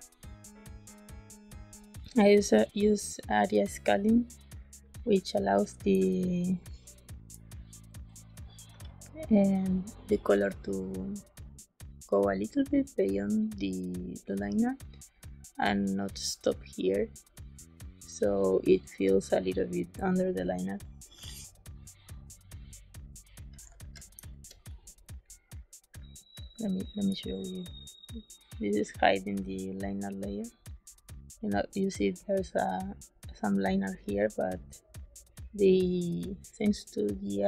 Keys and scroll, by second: 5.8 space, 8.6 z, 23.7 ctrl+d, 24.1 space.